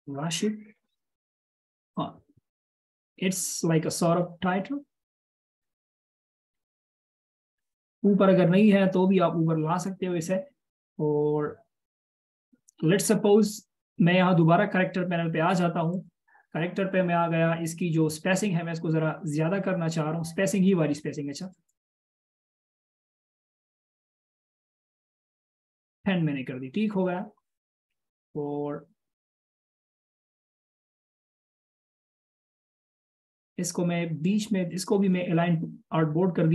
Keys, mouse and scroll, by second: 7.9 ctrl+shift+], 27.5 double click, 30.5-30.8 alt+shift+scroll down 1, 34.9 double click.